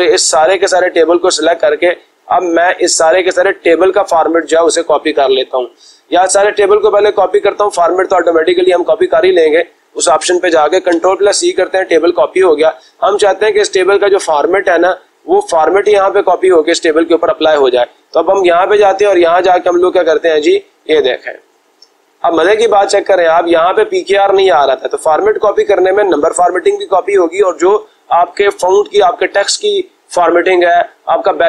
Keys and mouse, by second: 3.6-4.7 drag, 9.0-10.0 drag, 10.8 ctrl+c, 15.7-16.8 drag, 18.3 click.